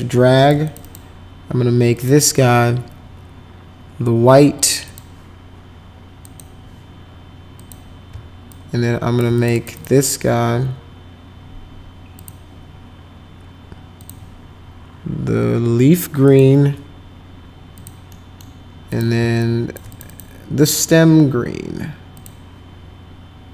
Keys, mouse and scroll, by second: 0.6 click, 0.8 click, 1.9 click, 4.8 click, 6.2 click, 7.5 click, 8.4 shift+click, 9.3 click, 9.5 click, 9.7 click, 12.1 click, 14.0 click, 16.2 click, 17.7 click, 18.1 middle click, 18.8 click, 19.4 shift+click, 19.9 click, 20.1 click, 22.1 click.